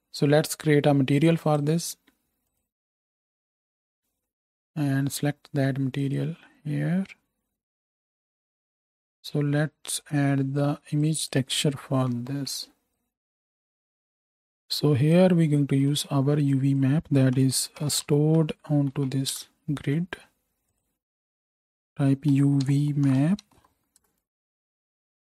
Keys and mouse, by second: 1.4 middle click, 2.4-3.9 middle drag, 6.5-8.9 middle drag, 8.9-10.0 right drag, 8.9 KP_0, 10.0 middle click, 10.2 click, 10.6 middle click, 11.2-14.4 ctrl+drag, 12.4 ctrl+t, 14.0 ctrl+z, 14.4-15.9 middle drag, 15.9-21.2 drag, 15.9 x, 17.8 t, 18.9 Down.